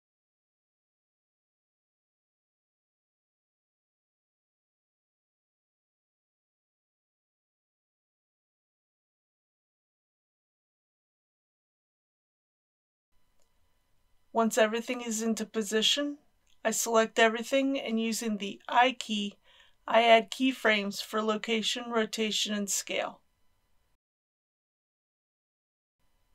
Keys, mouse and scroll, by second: 0.1-1.9 middle drag, 3.3 g, 3.5 z, 4.1 click, 4.3 middle click, 4.7 scroll up 1, 4.9 middle click, 5.5 KP_1, 5.8 r, 6.3 click, 6.4 scroll down 1, 7.5 shift+middle click, 8.5 g, 9.0 click, 9.2 r, 9.8 click, 9.9 middle click, 10.2 r, 10.3 z, 11.1 click, 11.5 KP_1, 19.0 a, 20.4 i, 22.4 click.